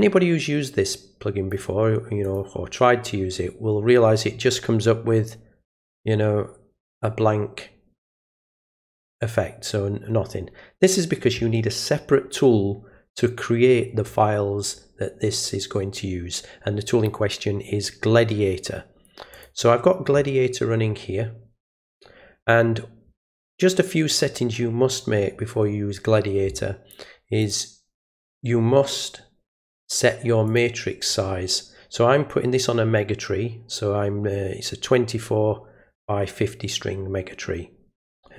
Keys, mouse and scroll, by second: 2.2 click, 8.0 click, 19.3 click, 27.4 click, 30.5 click.